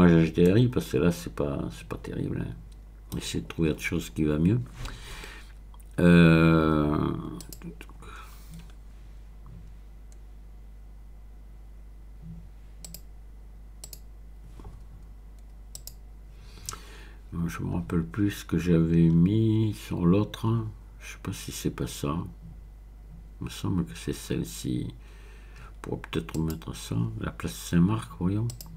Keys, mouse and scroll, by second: 0.5-3.5 middle drag, 7.4 click, 8.6-9.6 scroll up 1, 12.8 click, 13.8 click, 15.7 click, 17.2-18.5 scroll down 1, 19.0-19.9 scroll up 1, 19.9-20.6 scroll up 1, 26.3 click, 28.5 click.